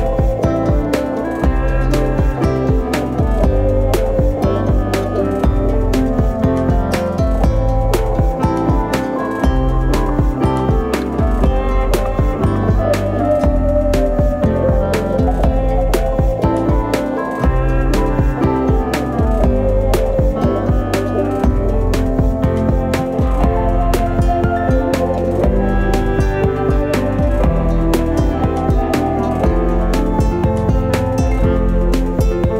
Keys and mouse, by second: 0.2 right click, 0.5 c, 1.1 alt+z, 1.4 c, 2.3 g, 4.1 right click, 4.3 alt+z, 5.3 alt+z, 13.2 alt+right click, 15.6 KP_3, 16.1 middle click, 16.8 middle click, 17.6 middle click, 18.5 right click, 19.8 shift+right click, 20.1 middle click, 21.0 shift+middle click, 21.3 middle click, 21.9 g, 23.4 middle click, 24.0 KP_3, 24.7 alt+z, 24.9 right click, 25.2 b, 26.9 w, 28.2 alt+z, 28.6 middle click, 29.3 Tab, 29.7 middle click, 30.2 shift+middle click, 30.9 Tab, 31.6 alt+right click.